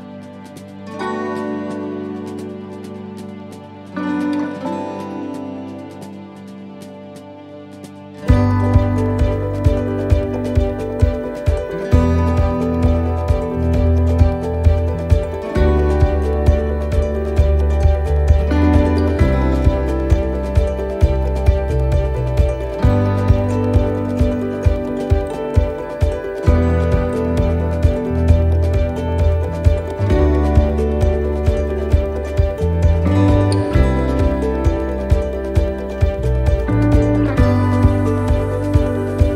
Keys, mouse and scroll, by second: 0.1 click, 4.6 click, 5.6 scroll, 7.6 scroll, 23.6 click, 37.3 click, 37.8 scroll.